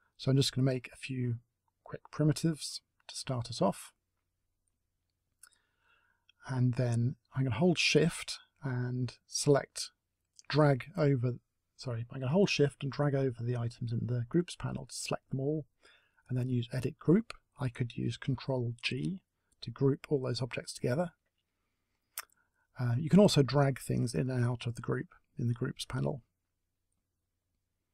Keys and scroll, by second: 2.0 ctrl+z.